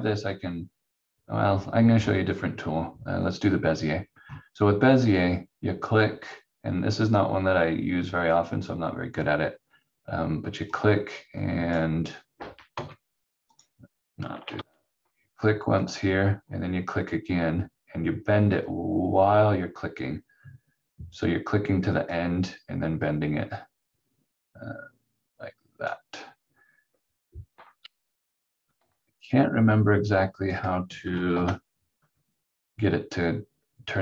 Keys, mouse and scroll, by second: 10.7 click, 12.7 Escape, 13.5 click, 14.5 ctrl+z, 15.8 click, 30.1 alt+click, 31.3 ctrl+z.